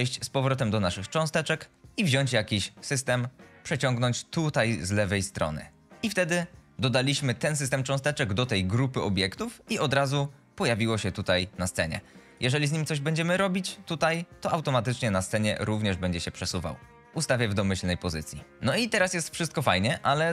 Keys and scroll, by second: 9.8 q, 10.4 w, 17.0 ctrl+z, 19.4-20.3 typing.